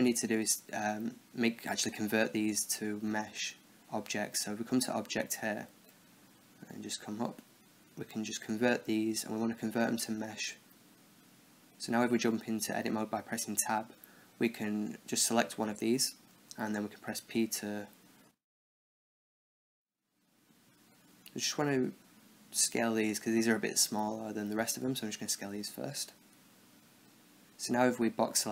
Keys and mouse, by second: 1.6 Tab, 2.3 Tab, 3.6-5.6 drag, 11.3 Tab, 13.5 z, 14.9 b, 17.5 a, 18.2 b, 19.5 s, 21.0 g, 22.7 a, 23.0 b, 23.9 g, 25.0 s, 27.1 a, 28.1 b.